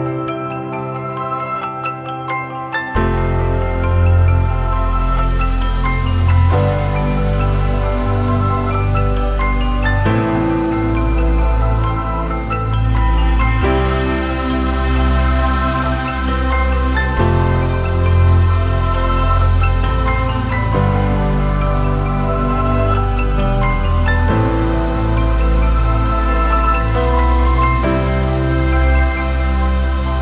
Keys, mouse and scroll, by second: 4.6-6.0 scroll up 1, 11.8 typing, 17.0 double click, 28.3 alt+BackSpace.